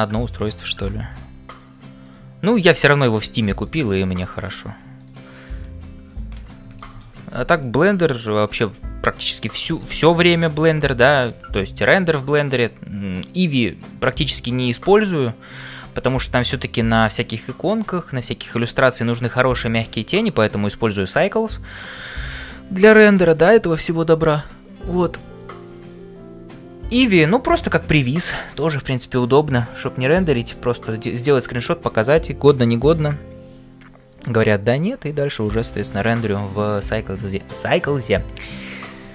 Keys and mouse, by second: 0.0-39.1 typing, 0.0 click, 2.1 click, 3.6 click, 7.3 ctrl+s.